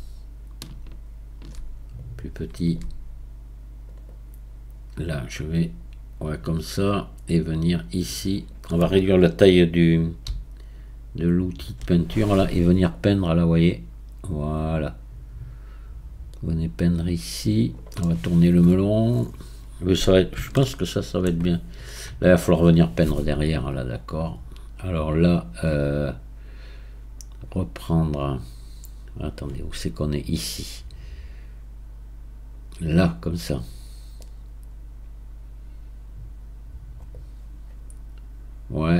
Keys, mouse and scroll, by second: 10.3 f, 11.7 f, 11.8 f, 12.9-16.4 drag, 18.0-24.1 middle drag, 24.1-27.1 right drag, 34.2-37.1 drag, 37.1-38.9 right drag.